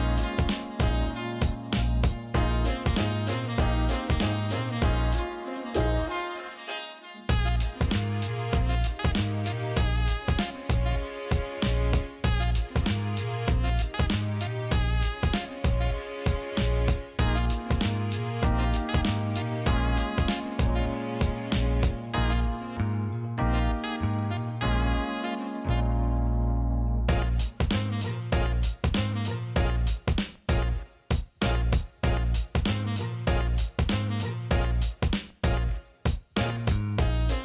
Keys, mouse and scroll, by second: 0.3 alt+shift+middle click, 0.7 alt+middle click, 2.1-9.9 shift+drag, 11.0 click, 11.6 click, 13.6 alt+middle click, 14.8 click, 15.8 click, 16.4 click, 16.8 alt+middle click, 19.8 Tab, 21.8-23.4 middle drag, 23.7-25.4 drag, 26.1 Tab, 26.8 click, 27.7 click, 29.0 click, 29.8-31.4 drag, 31.6 alt+middle click, 32.2 alt+middle click, 34.3 click, 35.5 alt+middle click, 36.5-37.4 alt+middle drag.